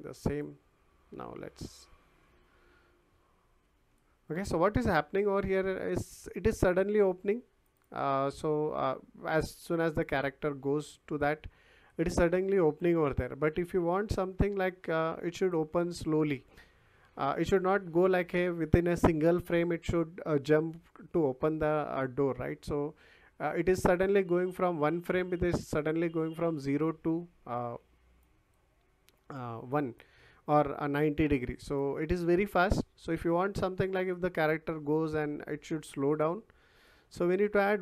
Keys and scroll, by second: 0.1 w, 2.7 s, 3.9 w, 4.8 s, 6.1 Escape.